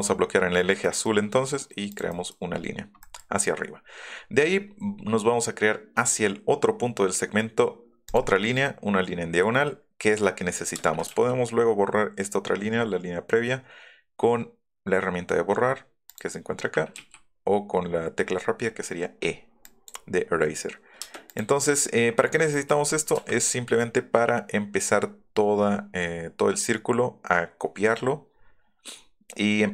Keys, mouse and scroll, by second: 0.8 middle click, 1.9 click, 2.1 middle click, 2.5 scroll up 1, 3.0 click, 8.0 click, 10.8 space, 11.2 e, 16.0 click, 16.9 e, 19.6 click, 22.3 middle click, 22.5 middle click, 23.1 q, 23.4 scroll up 1, 27.9-29.2 middle drag.